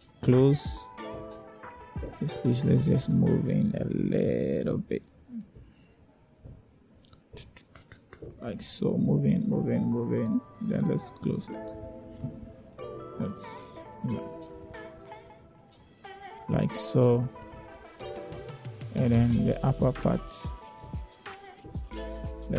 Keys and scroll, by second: 0.1 1, 6.0 7, 21.6 7.